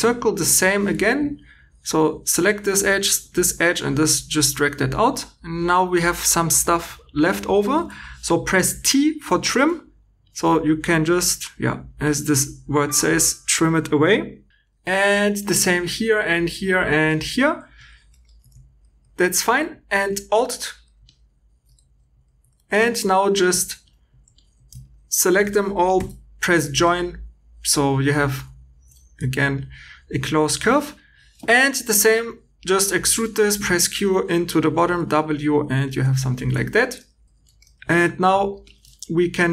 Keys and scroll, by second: 19.4 2, 21.7 1, 22.7 2, 25.9 j, 31.4 3, 33.5 q, 34.7 w, 35.7-36.8 typing.